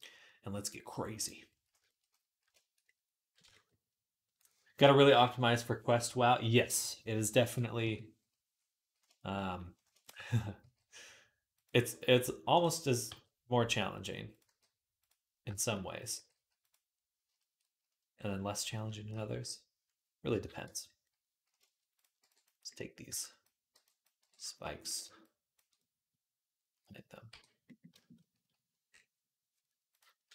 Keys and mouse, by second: 1.0 click, 1.1-12.3 middle drag, 7.6 KP_3, 10.4 g, 12.3 click, 12.9-21.8 middle drag, 12.9 g, 14.3 g, 16.1 g, 19.1 KP_3, 20.5 Tab, 21.8 click, 21.9-30.3 middle drag, 22.0 b, 22.9 b, 24.0 b, 24.7 b, 27.1 h.